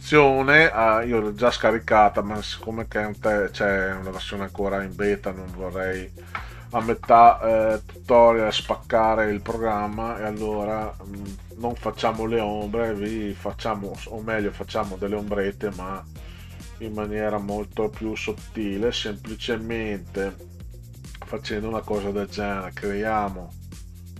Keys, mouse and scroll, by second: 6.8 scroll up 2, 20.6 click, 21.8 click.